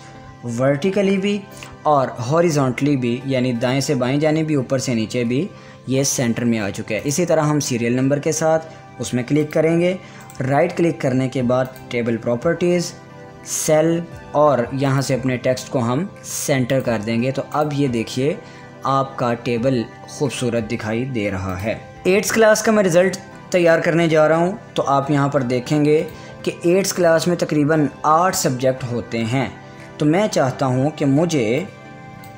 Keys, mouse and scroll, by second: 7.5 click, 9.9 click, 10.0 click, 10.8 right click, 12.2 click, 15.5 click, 21.9 click, 23.5-28.5 drag, 32.2 click.